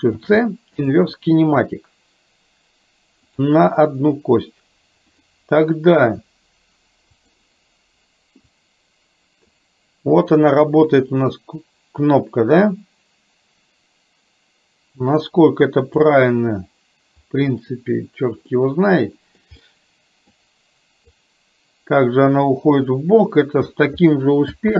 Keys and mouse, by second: 0.1 ctrl+shift+c, 3.4 click, 5.1 click, 7.3 click, 8.5-16.1 drag, 18.6 middle click, 19.8 middle click, 21.3-23.8 drag.